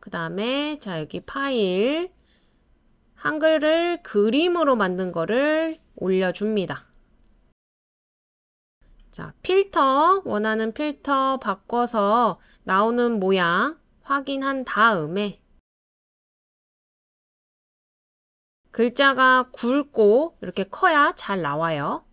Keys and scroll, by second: 1.7 typing, 19.1 typing.